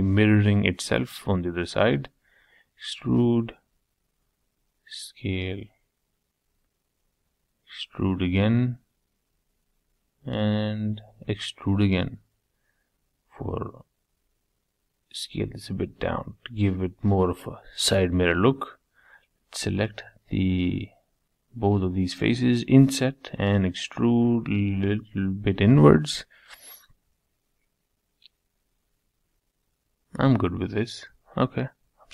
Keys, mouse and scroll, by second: 1.6 e, 6.3 middle click, 7.2 e, 10.1 e, 12.0 s, 13.8-16.1 middle drag, 16.1 3, 16.4 click, 17.3 scroll up 2, 17.5-18.7 shift+middle drag, 18.7-19.1 scroll up 2, 19.1 shift+middle click, 19.8 shift+click, 22.9 e, 24.6-25.6 middle drag, 25.6 scroll down 3, 25.8-27.1 middle drag, 27.1 scroll down 3, 27.3-29.3 middle drag, 30.5 Tab, 30.9 Tab.